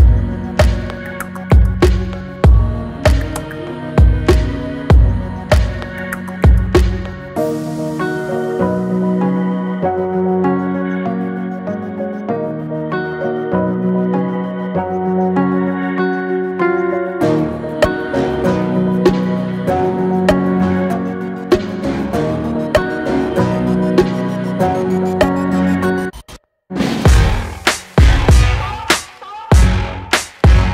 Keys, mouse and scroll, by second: 1.3 e, 8.6 middle click, 9.5-10.1 shift+scroll up 1, 10.1 e, 11.3 e, 13.6 alt+middle click, 14.2 scroll up 4, 14.5-15.9 shift+middle drag, 15.9 alt+z, 16.3 click, 20.9-21.5 scroll down 4, 21.5-23.0 middle drag, 23.8 alt+z, 24.3 click, 24.8-25.8 middle drag, 25.8 e, 27.4 e.